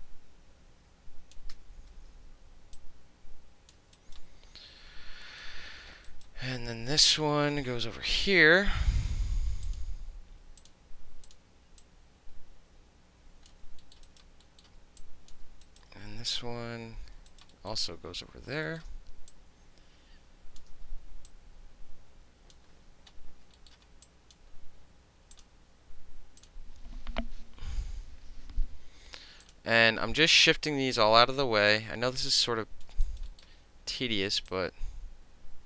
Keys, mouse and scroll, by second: 1.5 f, 1.8-2.8 middle drag, 2.8 click, 3.7 alt+middle drag, 4.0 alt+click, 4.2-5.3 alt+middle drag, 5.4-5.7 alt+middle drag, 6.1 alt+right click, 7.1 alt+right click, 8.2 alt+click, 9.7 alt+click, 10.6 click, 11.3 click, 11.8-13.5 drag, 13.8 alt+middle click, 14.1 alt+right click, 14.6-16.5 alt+middle drag, 15.0-15.3 alt+drag, 15.7 alt+right click, 16.5 f, 17.3 alt+right click, 17.5 alt+middle click, 18.1 e, 18.8-19.3 alt+middle drag, 19.3-20.6 drag, 20.7 w, 21.3-22.5 drag, 23.0-23.6 middle drag, 23.7 alt+middle click, 24.1 click, 24.4-24.8 middle drag, 25.4 click, 26.4 click, 29.5 click, 30.5-31.7 drag, 32.2-32.9 drag, 33.1 alt+right click, 33.3 alt+middle click, 34.5-35.6 drag.